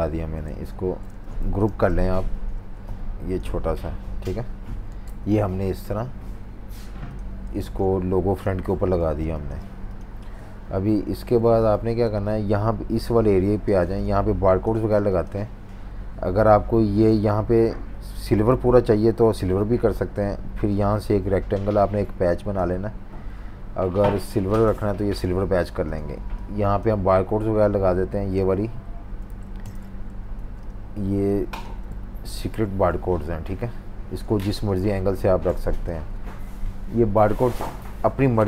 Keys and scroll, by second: 0.0 super+z, 0.5 super+z, 1.6 shift+super+g, 2.1 v, 5.0 super+-, 5.2 super+-, 5.3 super+-, 7.4 typing, 9.0-9.3 typing, 10.9 super+-, 11.2 super+-, 12.1 v, 13.6-15.6 typing, 19.3 m, 24.1 i, 25.2 v, 30.1 shift+super+v, 32.3 super+g, 32.9 typing.